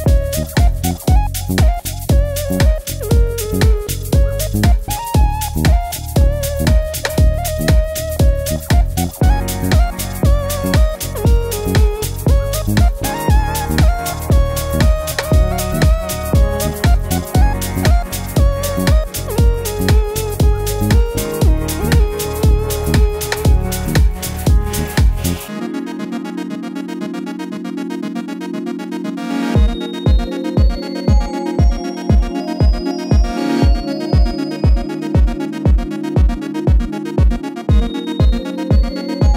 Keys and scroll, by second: 16.1 Left, 22.4 typing, 23.9 typing, 25.0 super+c, 25.1 super+v, 33.1 super+c.